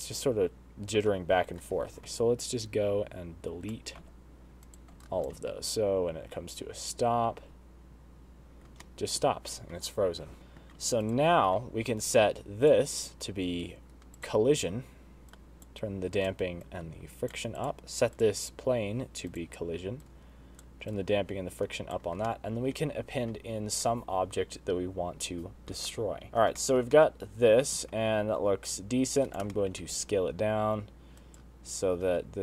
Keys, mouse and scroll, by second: 0.3 space, 1.6 space, 2.6 click, 4.7 x, 5.7 shift+right click, 6.1 space, 9.5 middle click, 10.1-10.6 scroll down 3, 10.4 scroll up 2, 10.6 shift+middle click, 11.4 middle click, 11.7 click, 13.5 click, 14.9 click, 16.1 click, 16.8 click, 17.6 click, 18.4 click, 19.0 click, 20.0 click, 20.3 click, 20.8 click, 21.6 click, 23.0 middle click, 26.8 middle click, 26.9-27.3 scroll down 5, 27.4 shift+middle click, 27.7 middle click, 28.5 s, 30.3 shift+middle click, 30.7 s.